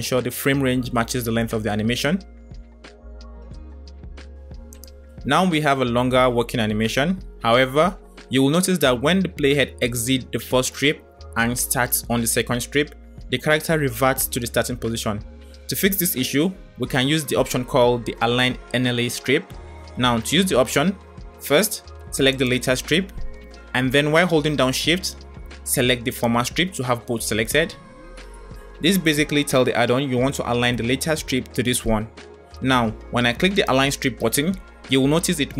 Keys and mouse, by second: 2.4-3.2 middle drag, 4.6 click, 5.0 space, 6.9 space, 9.4 click, 9.7 space, 11.3 space, 12.0-14.1 drag, 22.2 click, 26.1 shift+click, 33.7 click.